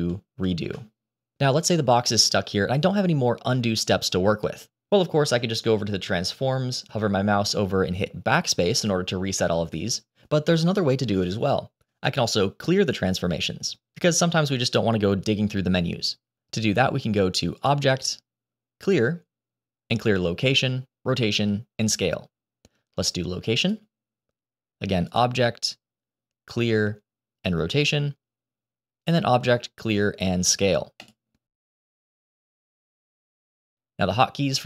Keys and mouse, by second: 0.3 ctrl+shift+z, 17.5-23.6 drag, 24.9-27.8 drag, 28.6-33.2 drag.